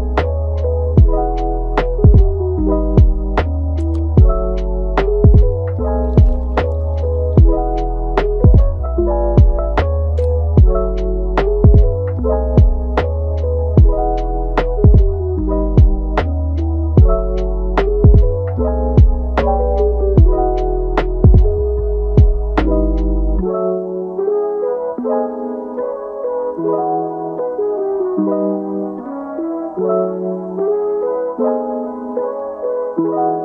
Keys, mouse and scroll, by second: 1.0 e, 2.5 click, 2.9 alt+s, 3.8 click, 4.5 alt+s, 5.7 middle click, 6.3 g, 7.8 alt+s, 8.9 middle click, 9.8 g, 10.4 Tab, 10.7 click, 11.0 middle click, 11.6 Tab, 12.3 drag, 13.2 g, 14.2 click, 14.5 g, 15.3 click, 15.8 alt+s, 16.8 click, 17.2 alt+s, 18.5 Tab, 18.9 scroll down 1, 19.2-19.9 middle drag, 19.9 scroll up 1, 20.1-22.3 middle drag, 22.3 scroll up 2, 22.9 click, 23.4 drag, 23.7-24.1 middle drag, 24.1 Tab, 25.3 g, 27.4 alt+s, 28.7 middle click, 29.5 click, 30.2 click, 30.7 click, 31.1 Tab, 31.5 click, 32.4 alt+s.